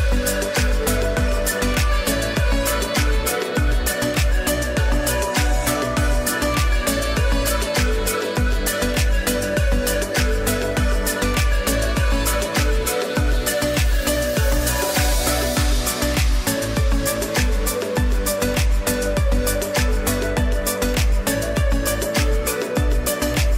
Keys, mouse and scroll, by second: 3.4 space, 3.6 click, 4.1 space, 4.5 click, 5.1 space, 5.3 click, 5.8 space, 8.0 click, 8.7 click, 8.8 click, 12.3 z, 12.9 click, 13.1 space, 13.4 click, 13.8 space, 14.4 click, 15.5 space, 15.8 click, 16.3 space, 19.7 space, 20.1 ctrl+e, 23.1 w.